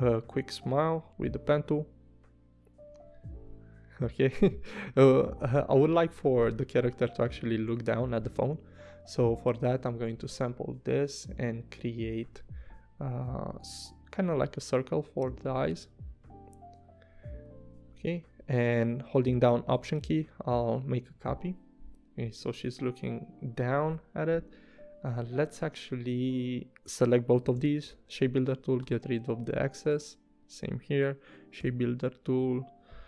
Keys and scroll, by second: 1.0 p, 2.9 v, 17.1 v, 27.6 shift+m, 28.9 v, 31.6 shift+n, 32.4 shift+m.